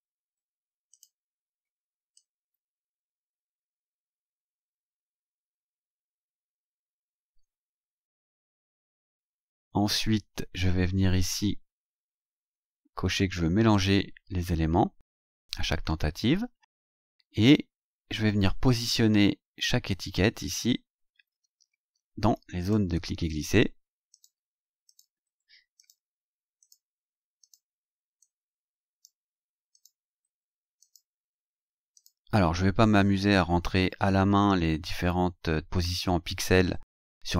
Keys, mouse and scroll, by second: 0.9 click, 2.1-3.3 drag, 3.7 ctrl+c, 4.9 click, 5.9 scroll down 2, 6.6 ctrl+click, 6.8 ctrl+v, 8.9-9.3 scroll up 2, 9.8-10.1 scroll up 2, 10.3-11.1 scroll up 4, 11.5-12.5 scroll up 4, 13.7 click, 16.4-18.9 scroll down 12, 19.2 scroll down 2, 20.0 scroll down 2, 21.1-21.8 scroll down 4, 22.6 click, 24.1 click, 24.8 click, 25.7 click, 26.6 click, 27.4 click, 28.2-29.2 drag, 29.7 click, 30.8 click, 31.9 click.